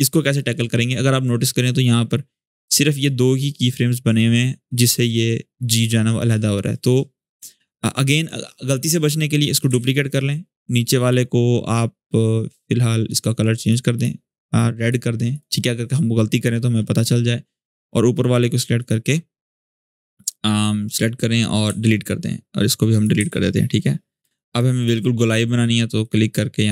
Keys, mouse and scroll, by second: 4.8 click, 7.9 click, 9.6 ctrl+d, 10.7 click, 13.4 click, 15.1 click, 18.5 click, 22.6 click, 23.7 scroll up 1, 24.0 space, 24.1 click, 24.5 space, 25.8-26.7 drag.